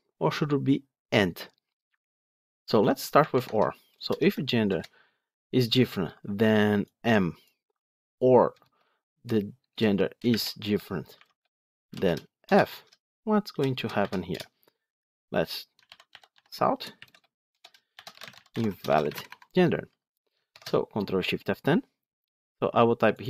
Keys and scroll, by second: 4.6 Return, 16.3 Tab, 20.4 ctrl+shift+F10.